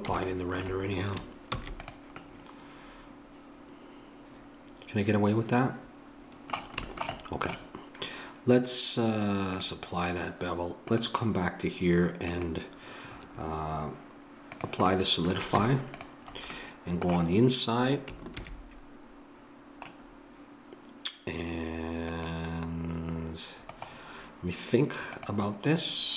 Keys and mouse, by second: 1.5 ctrl+s, 1.5-5.0 middle drag, 9.5-13.9 drag, 13.9-15.6 middle drag, 15.6 Tab, 18.3 ctrl+r.